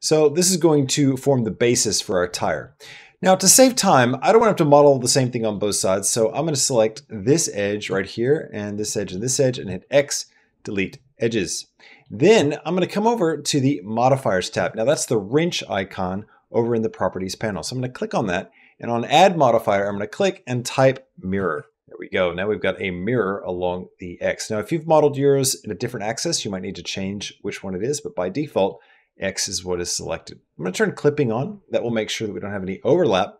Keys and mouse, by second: 0.2 middle click, 2.5 click, 3.7 middle click, 5.3 middle click, 5.8 click, 6.3 middle click, 8.0 shift+click, 8.6 shift+click, 8.9 middle click, 9.5 x, 11.2 middle click, 19.6-21.7 drag, 21.6 r, 24.3-25.6 middle drag, 28.3 middle click, 30.4 click.